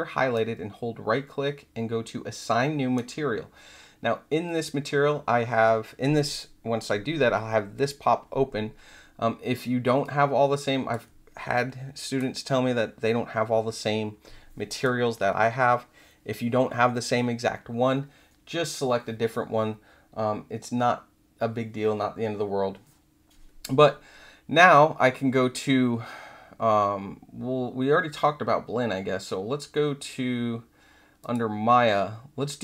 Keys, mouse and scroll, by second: 0.3-3.4 right drag, 10.0 click, 31.2 click.